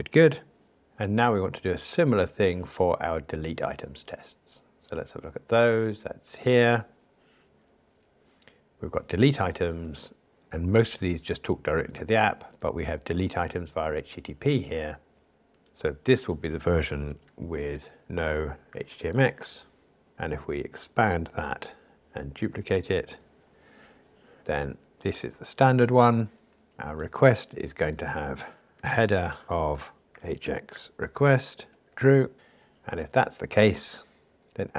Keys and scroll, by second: 20.1 alt+Up, 21.5 super+d.